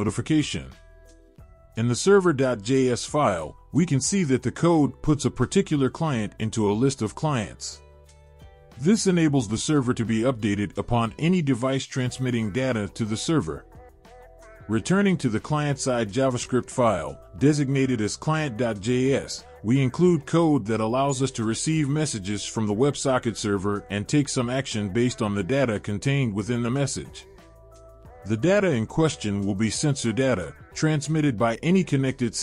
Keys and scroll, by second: 23.7 ctrl+z.